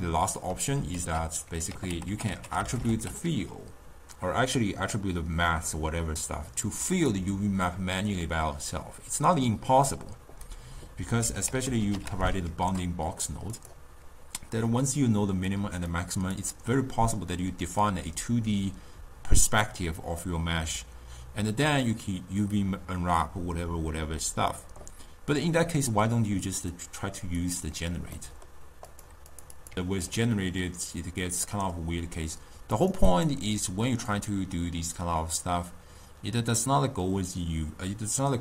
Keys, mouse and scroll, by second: 1.0 ctrl+a, 2.2 t, 7.0 click, 11.6 ctrl+a, 14.7-19.1 drag, 26.7 click, 27.6 click.